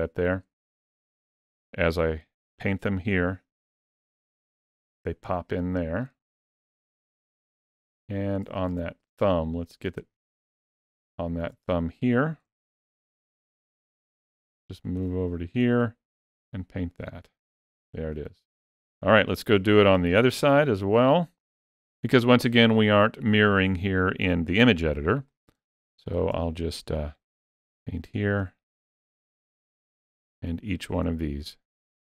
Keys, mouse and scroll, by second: 0.7 shift+middle click, 1.9 click, 4.6 middle click, 6.4 ctrl+middle click, 7.2 middle click, 8.6 shift+middle click, 9.3 ctrl+middle click, 10.0 shift+middle click, 12.8 shift+middle click, 13.0 shift+middle click, 13.5 shift+middle click, 13.9 shift+middle click, 14.4 shift+middle click, 14.9 shift+middle click, 16.2 click, 19.4 ctrl+middle click, 19.8 ctrl+middle click, 20.4 shift+middle click, 21.0 ctrl+middle click, 22.0 shift+middle click, 24.7 ctrl+middle click, 25.2 ctrl+middle click, 25.7 shift+middle click, 27.3 click, 28.7 shift+middle click, 29.4 click, 30.4 shift+middle click, 31.5 click, 31.9 shift+middle click.